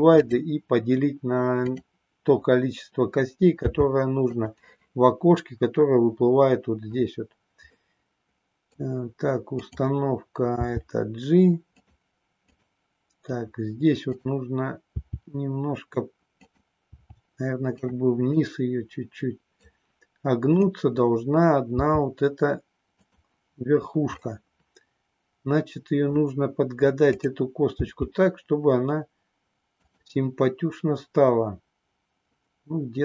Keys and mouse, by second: 1.6 click, 3.7 g, 4.2 click, 7.8 middle click, 9.5 click, 10.4 g, 12.4 click, 14.2 click, 14.9 g, 16.4 click, 16.8 g, 17.8 click, 18.4-19.7 middle drag, 20.5 click, 21.8 g, 24.2-26.2 middle drag, 27.2 click, 27.7 g, 29.8 click.